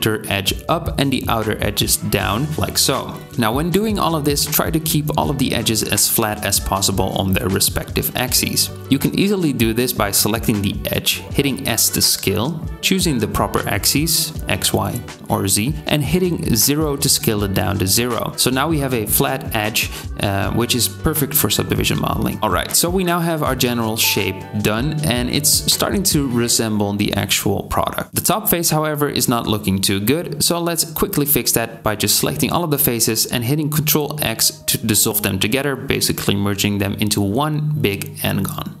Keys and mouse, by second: 2.0 KP_1, 2.6-10.3 drag, 2.6 g, 4.9 middle click, 4.9 right click, 5.2 Tab, 10.5 alt+middle click, 11.6 alt+shift+middle click, 11.8 s, 15.8 g, 19.0-22.8 drag, 22.4 Tab, 28.1 3, 28.6 KP_7, 30.5 c, 35.9 ctrl+x, 36.5-38.8 drag, 38.3 KP_7.